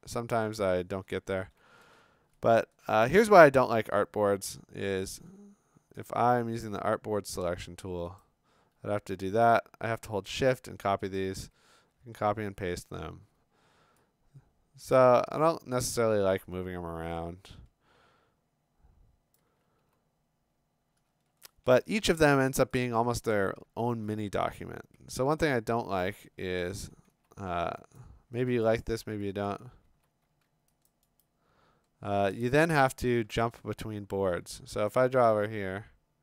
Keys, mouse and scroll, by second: 1.8 ctrl+z, 2.4 ctrl+scroll, 2.4 click, 2.5 click, 2.8 click, 5.0 scroll, 5.2 ctrl+z, 6.8 click, 8.3 click, 9.4 shift+click, 10.5 shift+click, 11.2 shift+click, 11.9 ctrl+c, 12.1 ctrl+v, 19.3 click, 19.8 b, 20.9-21.3 scroll, 23.4 click, 23.7 scroll, 24.4 b, 25.5 right click, 26.4 Escape, 26.8 v, 27.1 b, 28.0 ctrl+click, 28.6 ctrl+click, 30.9 click, 31.2 right click, 32.6 click, 33.5 scroll, 34.3 b, 35.2 click.